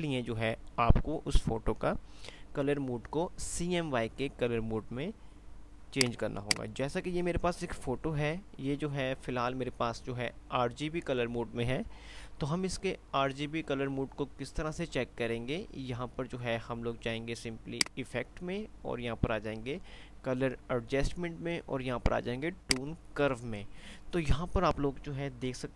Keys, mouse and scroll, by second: 6.0 click.